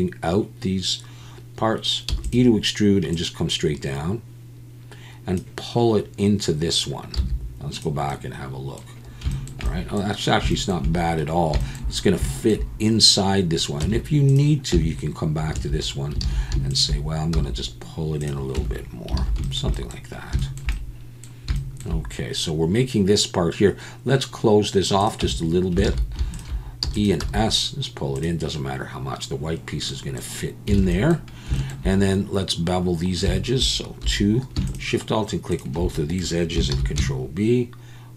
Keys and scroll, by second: 2.1 e, 7.2 z, 13.8 Tab, 14.7 Tab, 15.5 a, 16.2 alt+a, 17.3 s, 18.5 Tab, 19.2 alt+a, 25.2 Tab, 25.9 alt+a, 26.8 e, 27.2 s, 30.8 alt+a, 34.0 2, 36.7 ctrl+b.